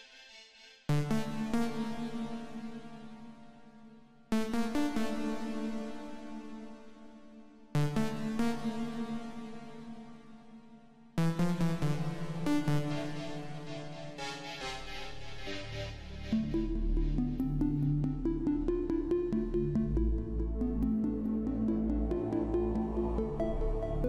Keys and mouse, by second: 0.0-1.5 drag, 2.2-4.0 drag, 6.4 KP_7, 8.7-10.5 drag, 12.3-14.2 drag, 14.2 KP_0, 18.4-20.2 drag, 20.9-22.9 drag, 23.2-24.0 drag.